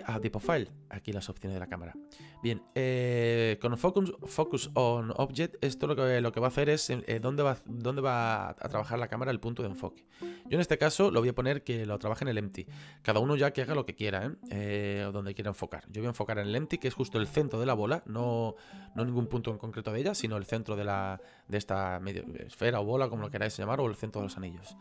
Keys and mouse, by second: 0.3 click, 10.1 click, 12.0 click.